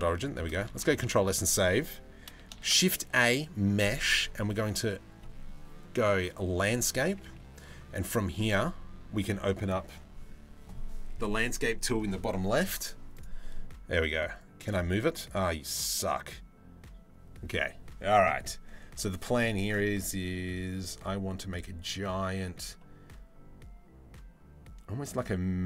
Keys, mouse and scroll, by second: 2.2 shift+a, 12.7 click, 14.0-14.4 drag, 15.3 click, 19.3-25.6 drag.